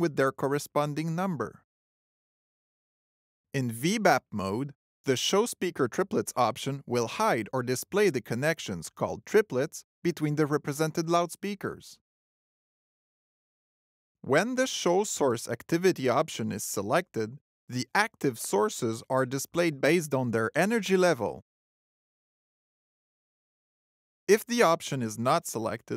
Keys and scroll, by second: 7.5 alt+t.